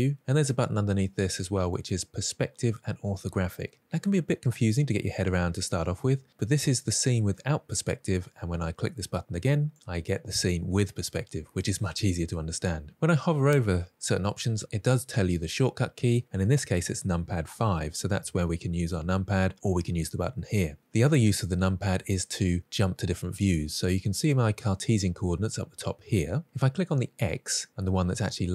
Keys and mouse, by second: 1.6 click, 4.1-7.4 middle drag, 9.0 click, 9.8-11.2 middle drag, 18.0 KP_5, 18.8 KP_5.